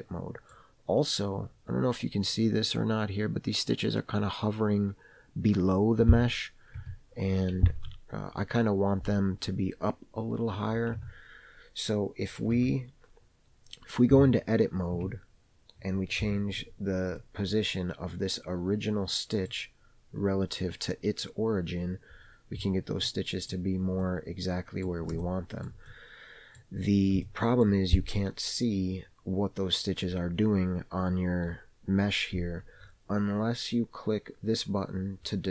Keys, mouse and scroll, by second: 1.3 scroll up 1, 6.4 Tab, 7.0 Tab, 7.8 alt+a, 11.1 Tab, 12.7 Tab, 15.1 Tab, 16.3 KP_Decimal, 17.3-19.6 middle drag, 21.8-23.1 scroll down 7, 23.1 middle click, 23.6-24.1 scroll down 3, 24.1 middle click, 25.3 shift+middle click, 26.0 middle click, 26.9-27.3 scroll up 1, 27.3 shift+middle click.